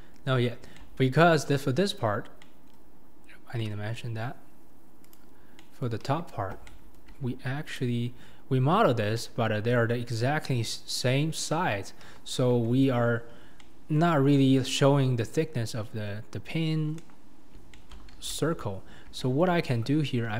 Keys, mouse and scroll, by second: 1.7-2.2 scroll down 2, 2.2 scroll up 2, 2.4-3.0 middle drag, 3.0-3.5 scroll up 1, 3.5 scroll down 1, 3.6-5.5 middle drag, 5.5 scroll up 1, 5.6 middle click, 6.0 KP_1, 6.7-7.8 shift+middle drag, 7.8 click, 8.3-9.0 scroll up 4, 9.0 scroll up 1, 9.2-12.0 middle drag, 12.0 KP_1, 12.7 Tab, 13.2-13.6 scroll down 2, 13.6-15.6 middle drag, 15.6-17.0 scroll up 1, 17.0 KP_7, 17.5 scroll down 2, 17.7 shift+middle click, 18.1 alt+z, 18.4-19.2 scroll up 2, 19.2-20.3 shift+middle drag.